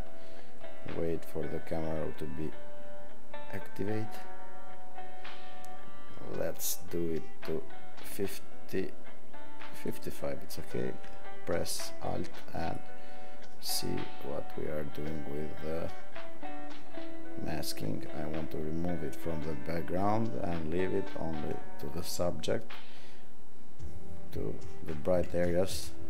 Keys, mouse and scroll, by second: 12.8-26.0 alt+drag.